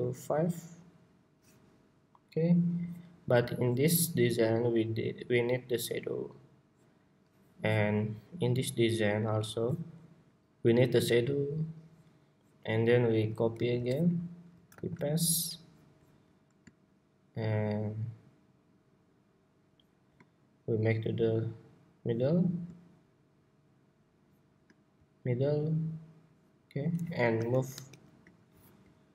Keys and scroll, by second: 13.2 super+c, 14.5 super+v.